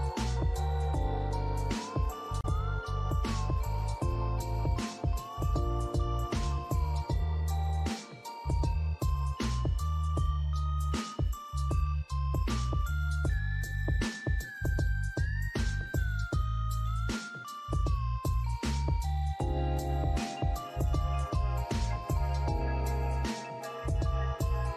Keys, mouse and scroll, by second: 1.8 alt+middle click, 2.2 alt+scroll up 1, 2.8 alt+click, 7.0 double click, 9.9 alt+click, 10.4 alt+middle click, 10.8 alt+click, 12.4 double click, 12.8 alt+middle click, 13.1 alt+click, 15.5 double click, 17.6 shift+click, 18.2 right click, 20.9 double click, 23.2 alt+click, 23.8 alt+middle click, 24.1 alt+click.